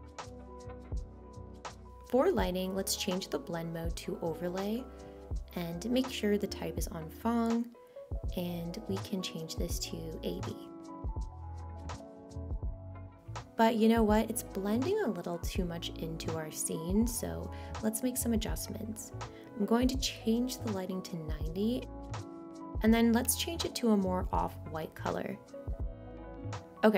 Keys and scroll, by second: 21.6 9, 22.0 0.